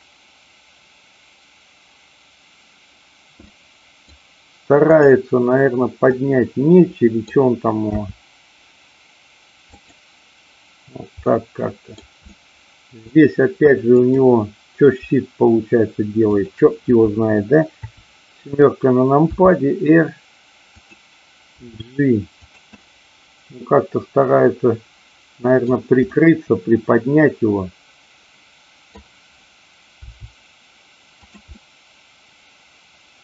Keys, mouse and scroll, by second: 3.4-4.1 middle drag, 6.2-7.2 middle drag, 7.9 r, 9.8 click, 11.2-12.1 middle drag, 12.3-12.9 middle drag, 13.8 click, 16.3 shift+click, 17.8 KP_7, 19.3 r, 20.7 click, 21.5 g, 22.4 click, 23.5-25.7 middle drag, 26.1-28.9 middle drag, 30.1 r, 31.2 click, 31.5-33.2 middle drag.